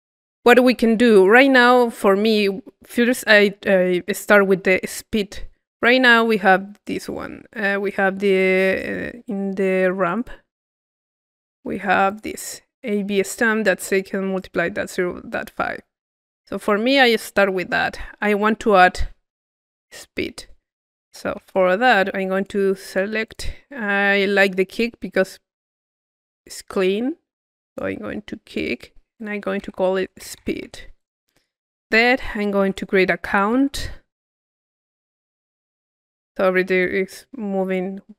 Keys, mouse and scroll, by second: 1.1-2.3 drag, 5.5 middle click, 5.8 click, 6.2 middle click, 6.3 click, 7.1 middle click, 7.7 click, 8.1 middle click, 10.0-13.0 drag, 13.9 middle click, 15.3 click, 16.1 middle click, 16.6-18.3 drag, 20.3-22.0 drag, 21.1 Tab, 22.3-23.9 drag, 24.1 middle click, 27.6 click, 28.5-30.3 drag, 31.0-33.3 drag, 32.6 Tab, 33.0-34.0 typing, 34.6-36.1 drag.